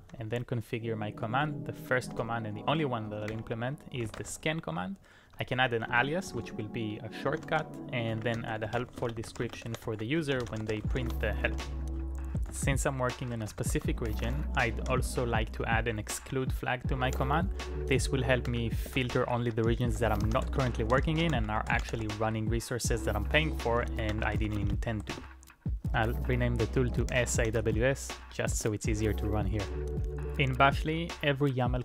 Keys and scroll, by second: 0.0-30.6 typing, 30.8 Up, 31.0 Up.